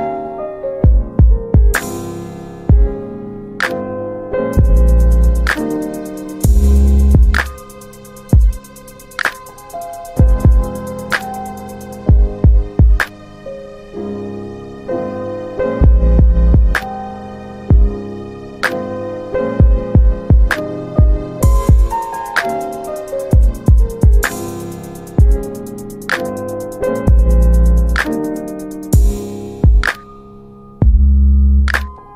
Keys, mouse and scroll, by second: 0.5 click, 2.4 alt+middle click, 3.5 alt+middle click, 8.9 ctrl+click, 12.3 alt+middle click, 14.6 ctrl+alt+middle click, 16.7 click, 22.5 alt+middle click, 24.4 ctrl+alt+middle click, 25.3 alt+middle click, 28.8 click, 31.0 click.